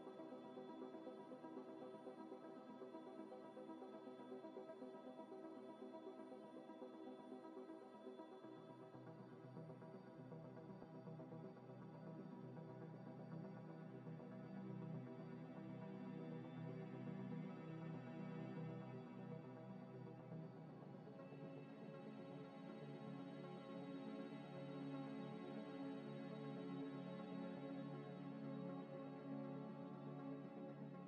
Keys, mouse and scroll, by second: 0.2 scroll down 1, 0.4-0.7 scroll up 1, 0.7 middle click, 1.2 middle click, 1.3 Tab, 1.4 3, 2.0 scroll up 1, 3.1 F3, 6.3 ctrl+shift+right click, 7.7 double click, 8.6 scroll up 1, 8.7 middle click, 9.0 z, 9.2 Tab, 9.5 middle click, 10.0 scroll up 1, 11.8-12.2 typing, 12.3 Return, 13.4 z, 13.6 z, 18.2 middle click, 21.9 scroll up 1, 22.1 scroll down 1, 22.4 middle click, 22.9 scroll down 1, 23.0 middle click, 24.4 F3, 25.3 c, 25.6 r, 26.1 Return, 28.2 F3, 28.7 b, 29.0 u, 29.0 m, 29.2 Return, 30.2 shift+d.